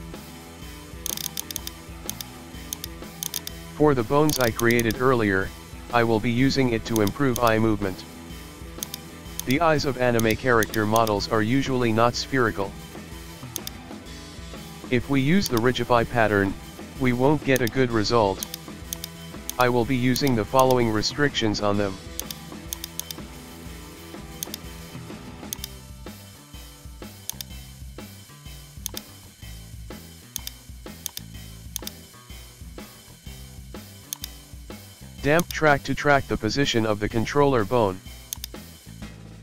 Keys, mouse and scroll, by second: 0.3 alt+r, 0.6 Tab, 1.0 click, 1.4 right click, 1.8 scroll up 1, 2.1 click, 2.4 shift+middle click, 2.7 shift+click, 3.2 shift+right click, 3.5 Tab, 3.7 alt+r, 3.8 Tab, 4.3 click, 4.6 right click, 4.9-5.7 scroll down 2, 5.1-5.4 shift+middle drag, 5.7-6.0 middle drag, 6.5 KP_1, 6.9 click, 7.6-8.2 middle drag, 8.2 scroll up 1, 8.4-8.9 shift+middle drag, 8.9 right click, 9.4 right click, 9.7-10.2 scroll down 1, 10.2 click, 10.7 click, 11.0 click, 11.3-12.4 shift+middle drag, 12.4 scroll down 1, 12.7-13.6 shift+middle drag, 13.6 right click, 14.2 g, 16.0-17.1 scroll up 1, 17.6 right click, 17.9-18.2 scroll down 1, 18.4 click, 18.9-20.2 drag, 21.1-22.2 shift+middle drag, 22.2 right click, 23.0-24.4 drag, 25.6 right click, 25.8-26.2 shift+middle drag, 26.2 g, 27.9 Tab, 28.3 shift+middle click, 28.4-28.9 scroll up 1, 28.9 right click, 29.7 Tab, 30.4 right click, 31.8 shift+right click, 32.3 Tab, 33.3 ctrl+p, 34.8 Tab, 35.0-35.4 scroll down 1, 35.4 right click, 35.9 g, 38.7-39.4 middle drag.